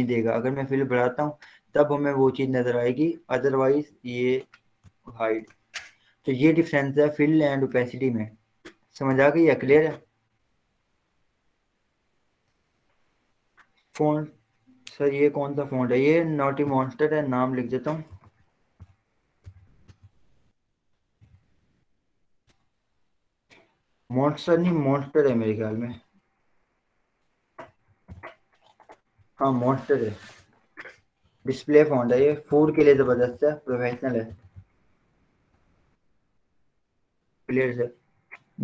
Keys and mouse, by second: 0.9 click, 5.6 Return, 7.7 click, 11.1 click, 17.8 click, 18.1-22.3 typing, 22.6 Return, 27.0 Return, 27.2 click, 28.2 t, 30.3 click, 33.4-36.0 typing.